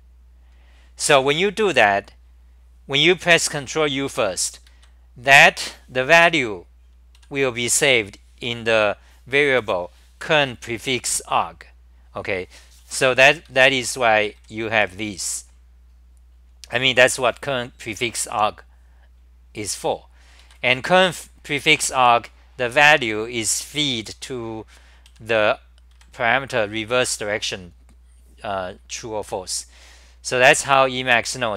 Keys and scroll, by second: 4.7 ctrl+g, 7.2 g, 7.9 1, 13.7 ctrl+g, 14.4 g, 14.7 1, 20.7 g, 21.0 1, 22.9 ctrl+g, 23.3-25.9 typing, 31.3 ctrl+g.